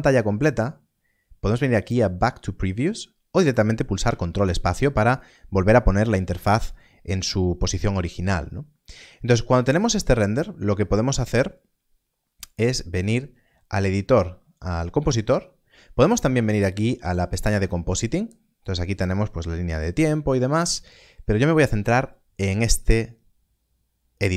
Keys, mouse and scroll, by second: 12.8 click, 17.0 click, 21.8 click, 22.2 ctrl+space.